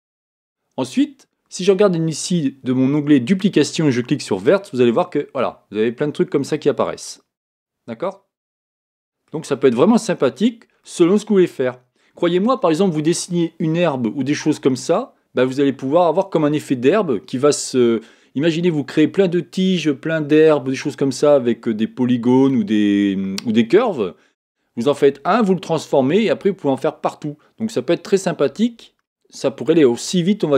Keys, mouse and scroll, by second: 4.4 click, 5.2-7.4 middle drag, 10.8-12.8 middle drag.